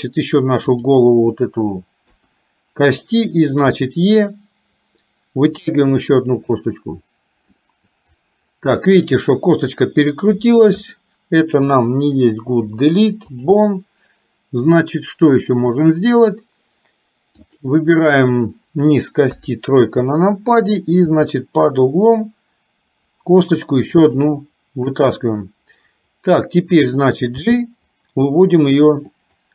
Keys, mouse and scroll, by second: 2.1 KP_1, 3.8 e, 7.5-9.1 middle drag, 10.9 click, 12.6 Delete, 17.4 click, 19.4 KP_3, 21.1 e, 24.9 KP_1, 27.5 g.